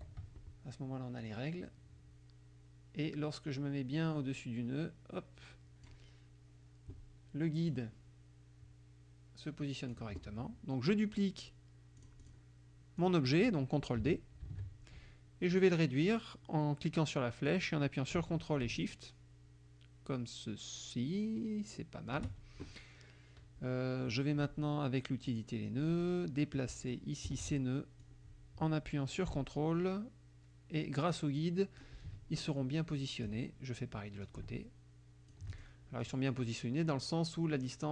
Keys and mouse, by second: 1.2-6.1 drag, 7.7-10.2 drag, 12.0 click, 13.1 click, 14.5 ctrl+d, 17.5-22.4 drag, 25.3 click, 26.1 click, 28.0-32.0 drag, 33.1 click, 34.3-35.8 ctrl+drag, 36.0 ctrl+click.